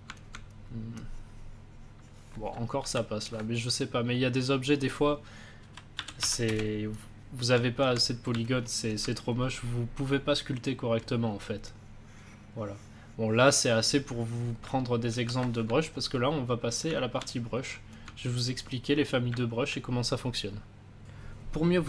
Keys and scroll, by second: 2.7 ctrl+z, 5.3-6.6 typing, 15.0 ctrl+z.